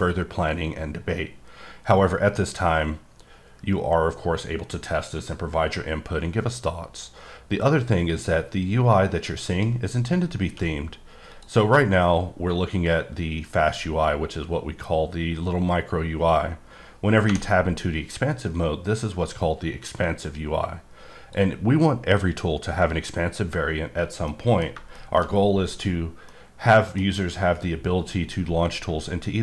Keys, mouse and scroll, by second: 9.5 right click, 10.4 q, 11.3 click, 12.8-13.5 ctrl+scroll down 3, 16.1 scroll down 3, 20.2 click, 24.3 middle click, 24.6 scroll down 1, 25.0 middle click, 25.8-26.3 scroll down 2, 26.3 middle click.